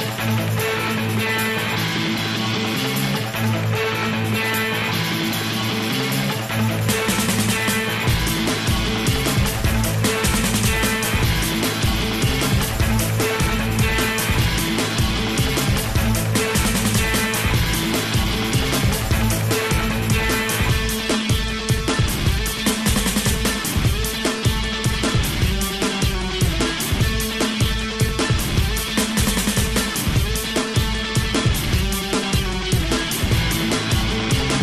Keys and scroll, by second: 15.9 i, 17.3 i, 19.0 i, 22.1 i, 26.0 i, 27.1 i, 27.9 i, 28.8 i, 29.5 i.